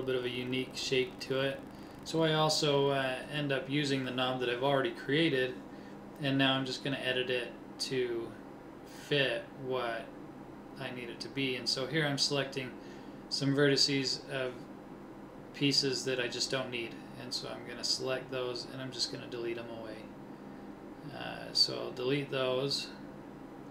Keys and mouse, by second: 1.9 ctrl+Tab, 4.1 c, 20.8 click, 21.6 Delete.